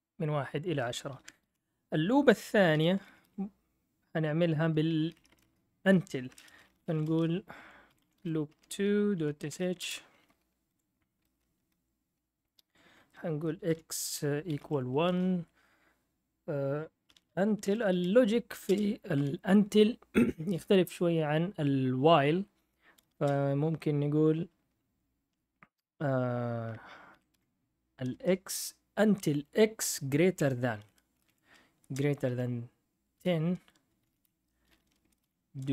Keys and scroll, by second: 0.9-3.2 typing, 5.0 BackSpace, 5.1 BackSpace, 5.3 BackSpace, 5.4 BackSpace, 6.5-10.0 typing, 10.7 F8, 13.4-15.1 typing, 15.1 Return, 16.6-19.1 typing, 23.1 space, 25.1 space, 26.9-28.1 typing, 30.1-35.7 typing, 34.3 Return.